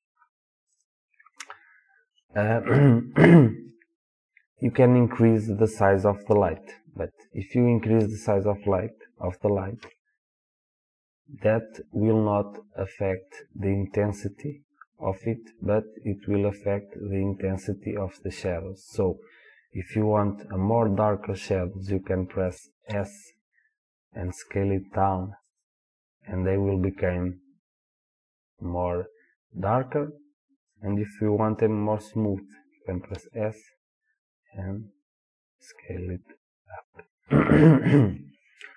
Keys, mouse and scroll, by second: 0.8 click, 9.8 s, 13.3 click, 22.9 s, 25.6 click, 33.2 s, 36.9 click.